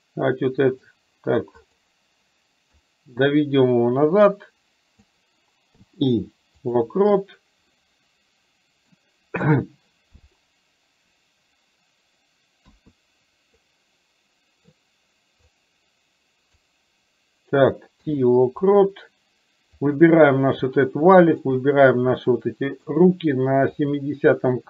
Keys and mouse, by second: 1.7 click, 2.9-5.2 drag, 7.8-8.9 middle drag, 12.7 KP_1, 13.7-14.7 middle drag, 15.7-16.8 drag, 19.8 click, 22.4 middle click, 23.9 click.